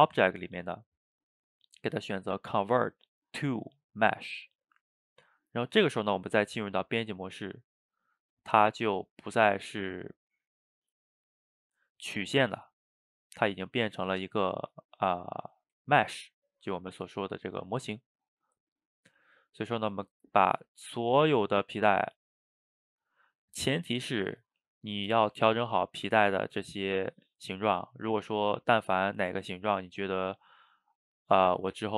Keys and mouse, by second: 7.1-9.1 drag, 9.1-12.1 middle drag, 15.9-19.7 ctrl+middle drag, 19.7-21.2 drag, 22.3-24.6 drag, 24.6-25.3 ctrl+middle drag, 25.3 a, 25.4 a, 25.6-31.6 middle drag.